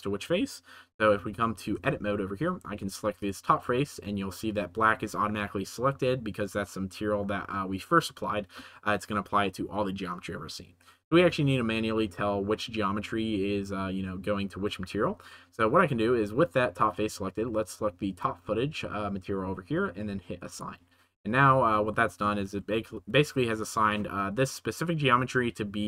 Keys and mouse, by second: 1.7 Tab, 2.6 3, 3.1 right click, 18.1 right click, 20.4 right click, 21.3 Tab, 21.8 middle click, 22.1 middle click, 22.6 g, 22.8 z, 23.5 click.